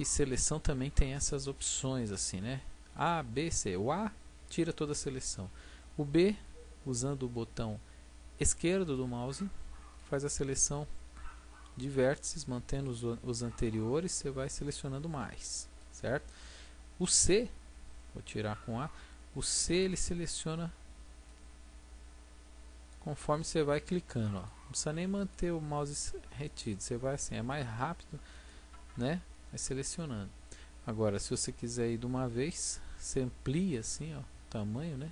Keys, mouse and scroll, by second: 4.4 a, 6.3 b, 11.6 b, 15.8 b, 18.3 a, 19.7 c.